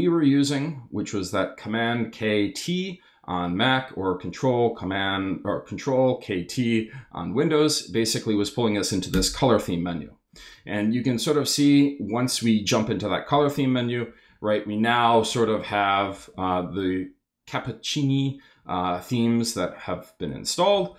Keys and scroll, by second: 9.1 Return, 13.3 Down, 16.1 Down, 20.7 Down.